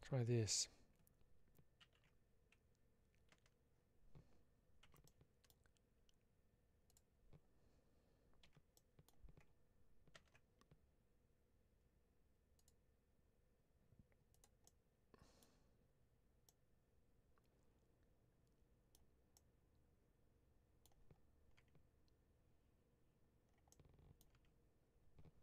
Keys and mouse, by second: 4.7 3, 4.9 middle click, 6.7 click, 8.3 h, 8.6 middle click, 14.2 click, 14.5 middle click, 16.3-18.8 middle drag, 19.2-20.7 middle drag, 23.6-24.1 middle drag.